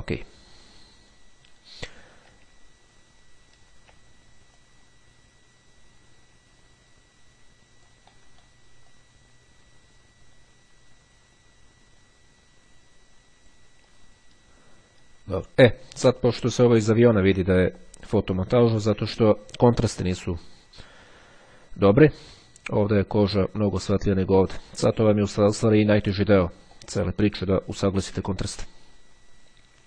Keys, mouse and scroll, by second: 0.3-2.3 ctrl+scroll down 2, 2.7-4.3 ctrl+scroll up 3, 4.7-8.4 drag, 8.2 right click, 8.9 click, 14.1-14.7 ctrl+scroll down 2, 14.8-15.3 ctrl+scroll down 2, 15.5-16.0 ctrl+scroll down 2, 16.1-16.7 ctrl+scroll down 3, 17.1-17.7 scroll down 2.